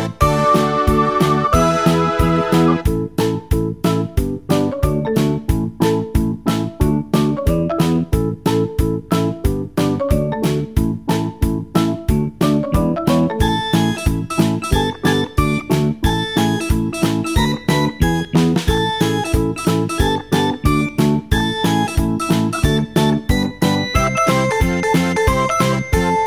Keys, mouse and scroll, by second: 8.1 click, 16.1-18.0 middle drag, 18.0-18.5 scroll up 1, 18.5-19.4 scroll up 1, 19.4-22.5 middle drag, 24.8-26.2 middle drag.